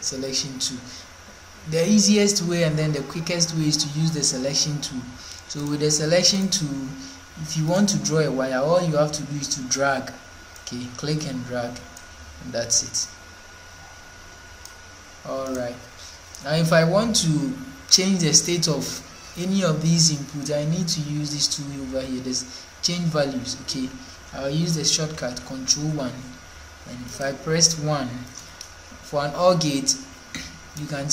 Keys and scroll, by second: 25.1 ctrl+1.